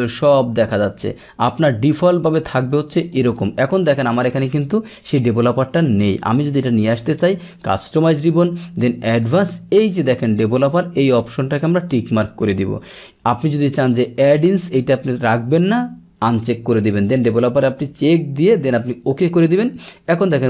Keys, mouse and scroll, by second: 1.5 click, 3.0 click, 6.2-7.2 right drag, 7.5 click, 11.7 click, 14.4 click, 19.1 click, 20.1 click.